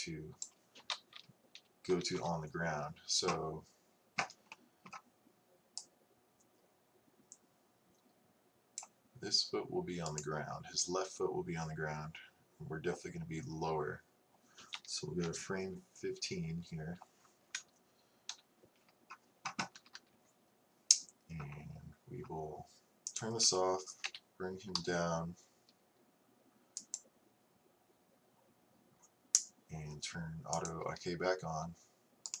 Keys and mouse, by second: 1.6 Left, 2.0 Right, 2.2 Right, 7.1-10.1 drag, 10.4-12.2 right drag, 18.3 KP_3, 19.8 a, 20.0 a, 23.2-26.8 drag, 24.2 g, 30.6-32.3 drag, 32.3 right click.